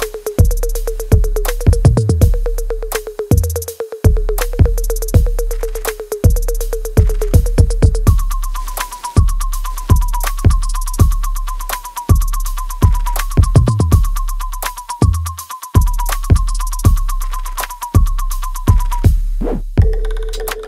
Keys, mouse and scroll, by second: 0.0 space, 1.0 click, 1.0 alt+click, 1.6 right click, 2.2 click, 2.6 alt+middle click, 3.0-6.9 alt+drag, 7.3 w, 8.2 click, 9.3 alt+middle click, 10.3 click, 11.5 ctrl+s, 12.2-13.8 alt+drag, 13.8 alt+click, 14.7 click, 15.0 alt+click, 15.8 alt+middle click, 16.8 right click, 18.0 right click, 18.7 alt+click, 19.2 alt+right click, 20.2 click.